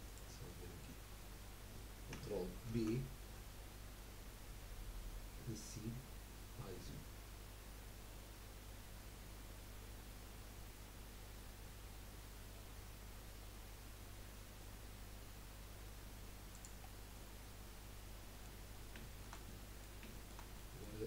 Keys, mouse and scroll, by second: 0.5 middle click, 1.0-1.7 scroll up 2, 2.7 ctrl+b, 17.0 scroll down 3, 17.2-18.6 middle drag, 18.6 scroll up 1, 19.3-21.0 shift+middle drag.